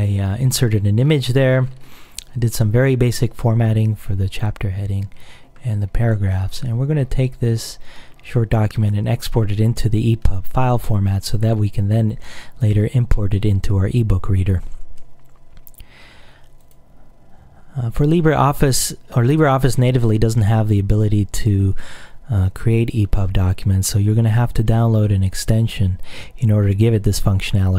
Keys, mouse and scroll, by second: 1.1-2.8 scroll down 2, 4.7-5.7 scroll down 2, 5.8-6.4 scroll down 2, 6.4-8.1 scroll up 2, 8.1-9.4 scroll up 1, 9.4-13.4 scroll up 1, 16.7 click.